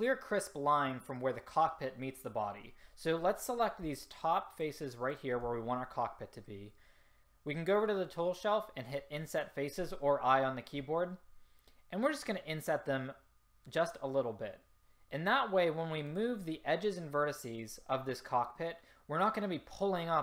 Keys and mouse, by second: 3.4-6.9 drag, 8.9 click.